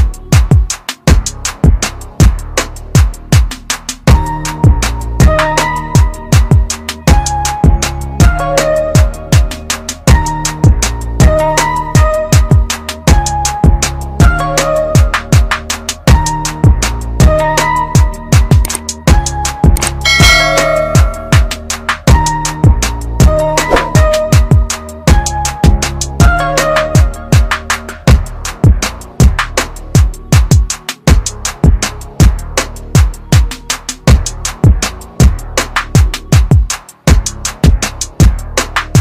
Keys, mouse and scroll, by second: 2.8 alt+click, 4.7 click, 7.1 alt+click, 9.3 ctrl+KP_Add, 14.6 click, 26.8 click, 33.3 click, 34.5-35.0 scroll down 1, 35.0-35.8 scroll up 1, 36.6 click, 37.4 scroll down 1, 38.8-39.0 scroll up 1.